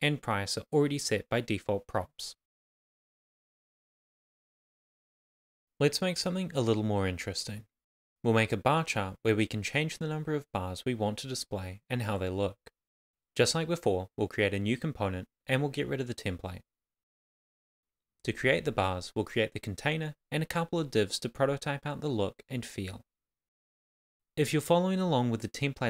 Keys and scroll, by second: 13.9 shift+b, 14.2 shift+c, 17.1 Down, 21.7-25.8 typing, 23.3 Right, 23.7 Return.